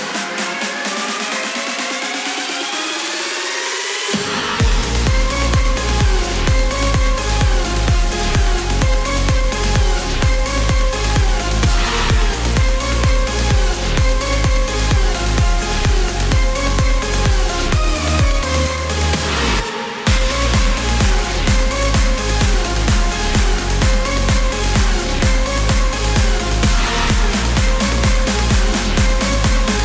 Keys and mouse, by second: 0.0 click, 2.8 click, 4.6 click, 5.9 click, 7.0 KP_1, 7.2 KP_0, 7.4 KP_0, 8.6 Return, 19.2 click, 20.2-21.8 drag, 23.3 click, 24.5 KP_8, 25.4 KP_Decimal, 25.6 KP_6, 26.3 Return, 27.8 click, 28.9 KP_8, 29.5 KP_Decimal, 29.7 KP_6.